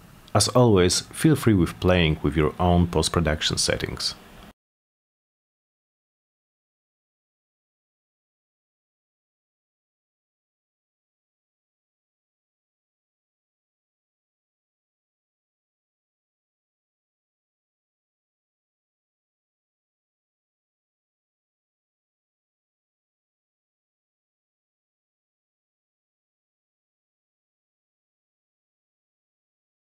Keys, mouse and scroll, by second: 0.3 click, 0.7 click, 1.5 drag, 2.1 click, 2.7 click, 3.4 click, 3.9 drag, 4.5 click, 5.1 Return, 6.0 BackSpace, 6.7 click, 7.8 click, 8.1 click, 8.4 click, 9.0 Return, 9.2 click, 11.0 click, 11.3 click, 11.7 click, 12.0 click, 13.1 click, 13.4 click, 15.2 click, 15.6 click, 17.1 click, 17.4 click, 17.8 click, 19.0-20.3 drag, 20.5-22.1 drag, 22.6-23.5 drag, 24.1 click, 24.5 click, 24.9 click, 25.4 Return, 25.8 click, 26.6 click, 26.9 Return, 27.8 click, 28.1 click, 29.5 click, 29.8-29.9 drag.